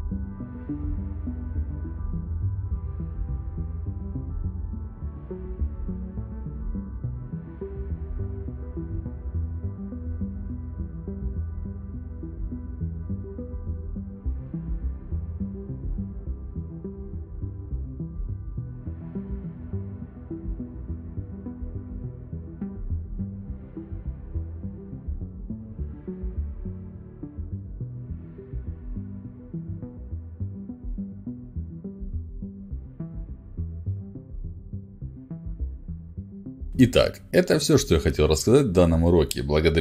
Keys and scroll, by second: 28.4 w, 32.2 a, 33.7 e, 34.7-36.7 typing.